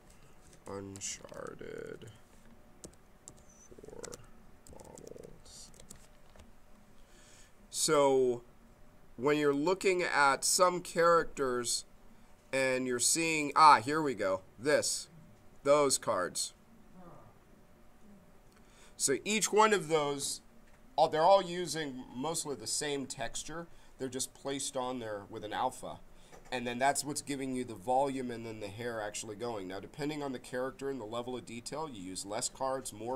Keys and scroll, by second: 0.1-2.5 typing, 4.0-6.1 typing.